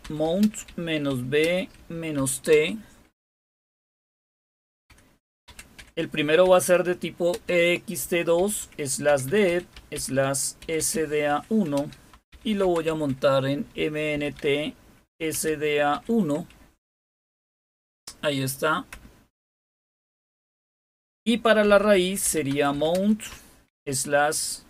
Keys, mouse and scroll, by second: 0.0-2.4 typing, 4.8-7.2 typing, 8.3-15.8 typing, 18.8 Return, 21.6-23.6 typing.